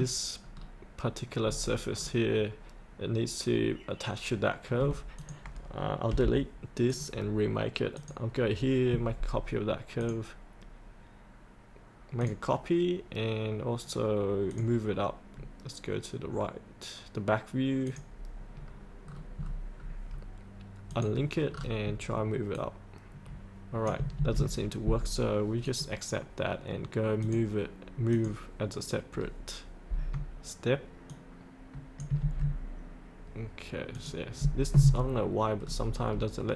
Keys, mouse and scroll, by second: 0.6 scroll down 1, 1.4-1.9 scroll up 1, 1.9-5.2 scroll down 1, 5.2 click, 19.1-19.4 scroll down 1, 19.8-20.9 scroll down 1, 20.9 click, 21.5 scroll down 1, 22.5-23.7 drag, 25.6-32.1 drag, 33.9 click, 35.6 scroll up 1.